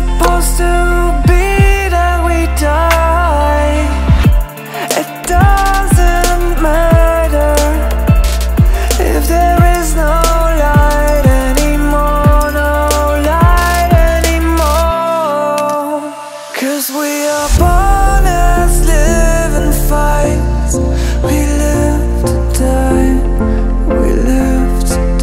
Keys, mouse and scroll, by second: 0.8 click, 0.9 click, 1.8 e, 3.6 r, 4.7 click, 5.0 s, 6.0 shift+middle click, 6.4 click, 6.6 e, 10.0 click, 12.6 shift+click, 13.3 f, 13.7 click, 13.9 Tab, 14.3-14.9 scroll down 6, 14.8 shift+middle click, 15.0-15.8 scroll up 7, 15.2 Tab, 15.8 click, 16.2 shift+r, 17.9 ctrl+z, 18.5 shift+d, 19.7 r, 20.5 e, 22.7 r, 24.0 e, 24.8 r.